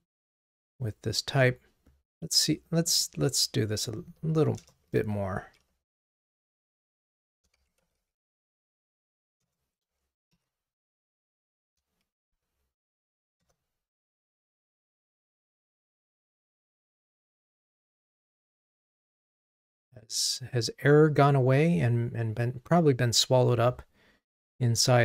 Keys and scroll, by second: 9.6 Return.